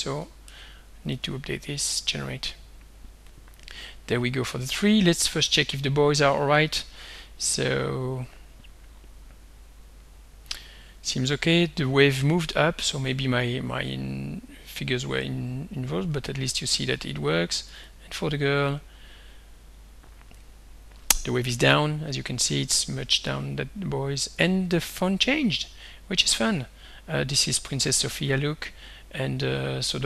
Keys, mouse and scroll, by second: 0.5 ctrl+c, 0.9 ctrl+click, 1.1 ctrl+v, 2.1 click, 3.3 click, 5.6 click, 17.8 click, 22.2 click, 25.7 ctrl+scroll down 1, 28.0 click, 29.3 click.